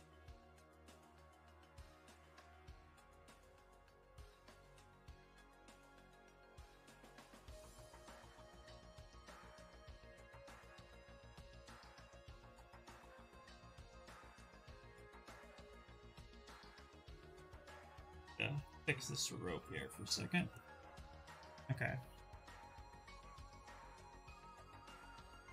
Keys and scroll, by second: 2.2 s, 7.2 ctrl+z, 7.8 ctrl+shift+z, 14.6 s, 24.6 q.